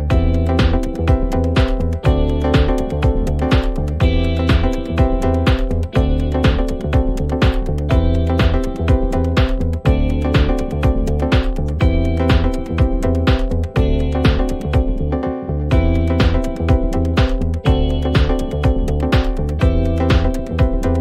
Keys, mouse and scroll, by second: 0.9 click, 0.9-5.7 typing, 1.3-3.6 drag, 5.0 click, 5.5 click, 6.6-7.8 drag, 9.6-10.8 drag, 10.6 F9, 12.4 click, 13.6 click, 14.0 click, 14.8 click, 17.0 click, 20.6 click.